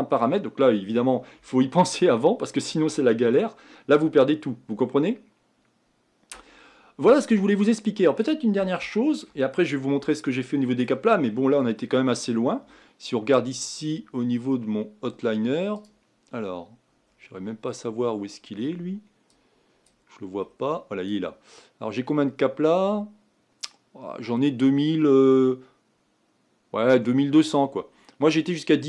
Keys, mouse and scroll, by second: 7.2-9.6 middle drag, 9.6-10.1 scroll up 4, 10.1-11.2 shift+middle drag, 11.2-11.7 scroll down 1, 11.7-15.9 middle drag, 15.9 click, 19.5 scroll down 10.